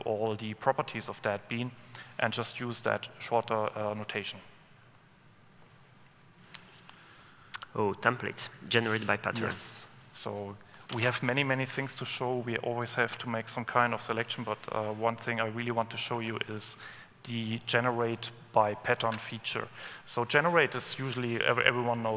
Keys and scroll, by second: 5.3 Escape, 15.4 super+n.